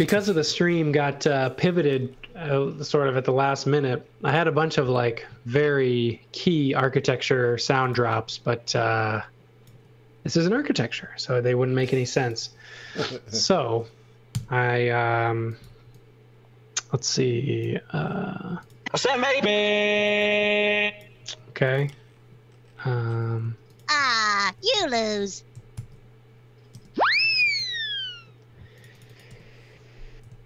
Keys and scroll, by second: 7.4-8.4 typing, 9.7 space, 14.3 Delete, 15.3 x, 15.6 v, 18.3 space, 19.7-21.2 typing, 24.3-25.2 typing, 25.7 super+c, 26.7 space, 28.5 Delete, 29.2 Delete.